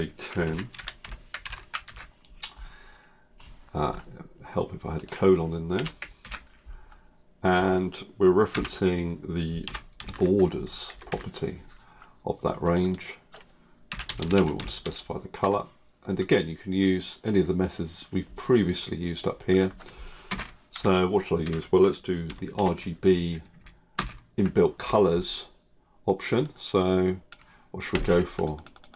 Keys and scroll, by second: 23.9 ctrl+space.